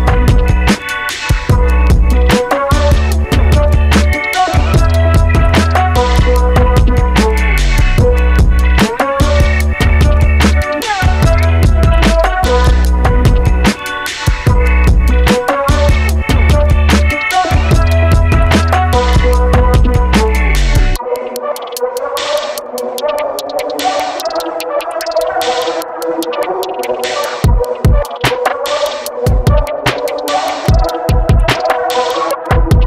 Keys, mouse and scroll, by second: 1.1 click, 1.6 KP_3, 2.2 scroll up 2, 3.4 shift+d, 8.6 shift+d, 13.7 click, 14.3-14.7 scroll down 1, 14.7-18.3 middle drag.